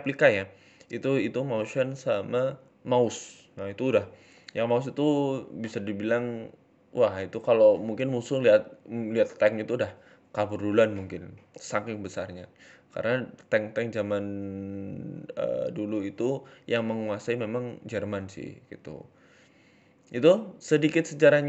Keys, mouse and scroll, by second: 2.5 scroll up 4, 2.8 shift+middle click, 3.6 Tab, 3.8 click, 5.0 g, 6.0 click, 6.5 g, 8.2 click, 8.7 g, 9.9 shift+middle click, 10.8 click, 11.3 shift+middle click, 11.8 g, 13.9 click, 13.9 g, 18.1 click, 18.5 g.